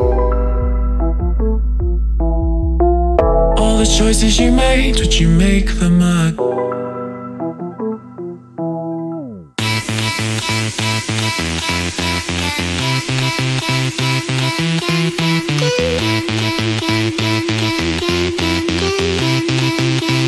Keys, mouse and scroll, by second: 5.6 click, 7.7 click, 10.5 click, 13.5 click, 14.9 click, 15.6 ctrl+space, 15.8 ctrl+click, 16.1 ctrl+space, 16.1 ctrl+space, 16.6 ctrl+click, 17.2 ctrl+space, 17.4 ctrl+click, 18.2 click.